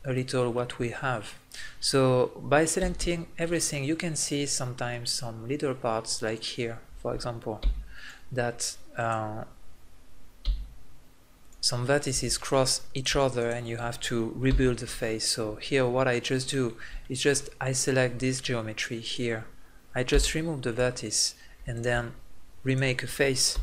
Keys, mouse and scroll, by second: 2.8 a, 2.9 a, 6.3-10.9 right drag, 7.6 x, 10.4 x, 11.9 right click, 12.4 middle click, 14.9 f, 15.1 middle click, 19.0 right click, 20.1 x, 23.5 f.